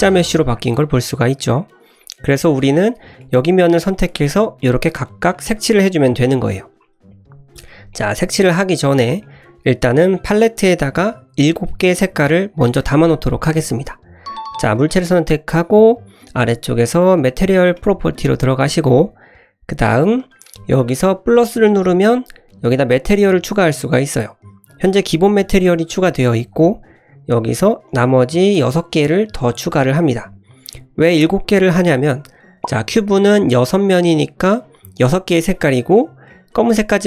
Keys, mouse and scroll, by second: 0.1 scroll down 1, 0.3 middle click, 1.0-1.5 scroll up 2, 1.5-1.8 scroll down 1, 2.0 middle click, 2.6 click, 3.2 middle click, 3.8 3, 3.9 click, 4.3 middle click, 4.8 click, 5.3 middle click, 5.8 click, 6.4 scroll up 1, 6.7-7.6 scroll down 2, 7.6 Tab, 7.9 middle drag, 8.5-9.2 scroll up 2, 9.2-9.7 middle drag, 13.9 click, 14.8 click, 17.7 click, 24.6 click, 27.3 click, 27.9 click, 28.5 click, 29.2 click, 30.0 click, 31.0-31.8 scroll up 2, 32.1-32.9 scroll down 3, 32.6 middle click, 34.2 middle click, 35.7-36.3 scroll up 4, 36.3 middle click.